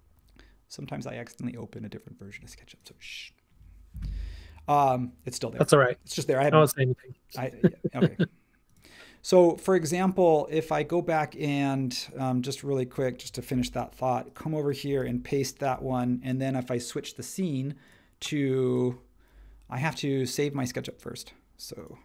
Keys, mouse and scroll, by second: 13.5 super+c, 15.0 super+v.